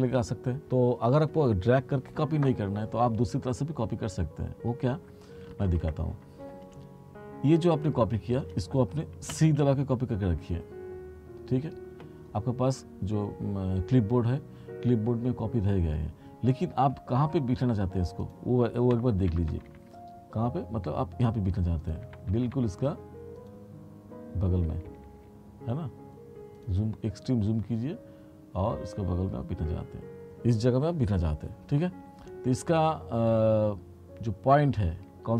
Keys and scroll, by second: 5.7 ctrl+z, 9.4 c, 19.0 t, 22.2 t, 24.8 t.